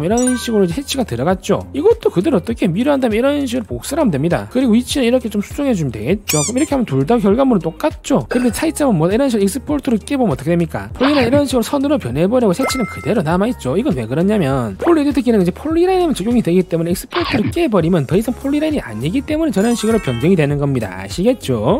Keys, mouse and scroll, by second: 0.0 right click, 1.8 right click, 2.0 click, 2.4 click, 2.9 right click, 3.1 click, 3.7 click, 4.1 right click, 4.5 click, 4.7 click, 5.2 right click, 5.4 click, 6.1 click, 9.7 click, 10.1 click, 10.5 right click.